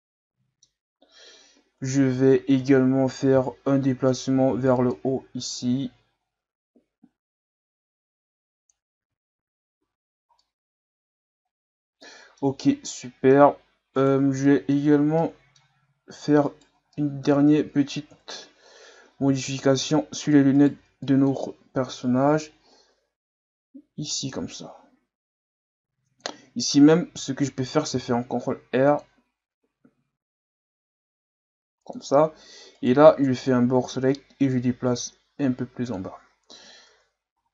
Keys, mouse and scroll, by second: 2.6 KP_1, 3.4 z, 4.1 right click, 4.5 b, 5.6-8.6 drag, 9.0 z, 9.4 Tab, 9.8 a, 10.0-10.4 scroll down 1, 10.4-14.0 middle drag, 14.0 right click, 14.4 middle click, 14.9 scroll up 1, 15.2-16.5 middle drag, 16.5 shift+right click, 16.9 middle click, 17.3 Tab, 18.1 KP_1, 19.2 z, 19.6 scroll down 1, 20.0-20.6 scroll up 1, 20.6 right click, 20.8 b, 22.5-25.5 drag, 27.9 ctrl+r, 32.8 right click, 33.0 b, 34.1-36.5 drag, 36.5 z, 36.9 Tab, 37.4 a.